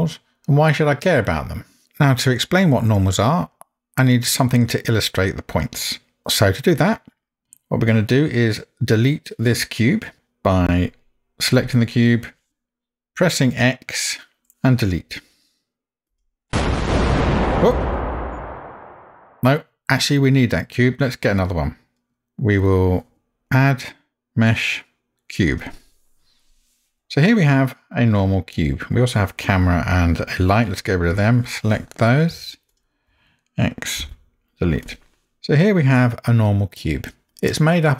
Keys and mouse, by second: 14.5 x, 23.9-25.9 drag, 27.0-29.0 middle drag, 34.0 x, 35.2-37.9 middle drag.